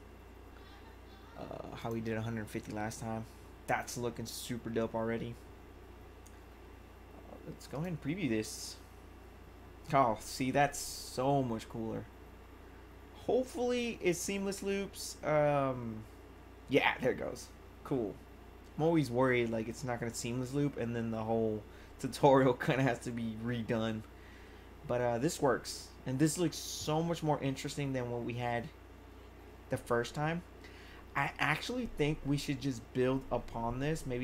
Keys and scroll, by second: 0.0-0.1 typing.